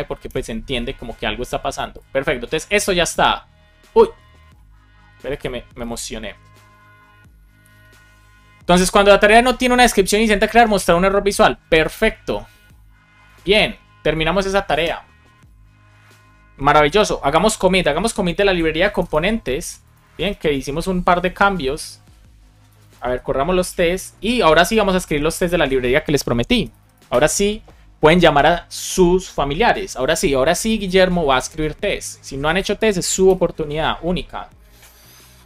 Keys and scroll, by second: 0.2 Return, 17.6 ctrl+c, 19.0 Return, 21.4 BackSpace, 23.1-25.2 typing, 26.5 space, 27.0 Return, 33.1 super+b.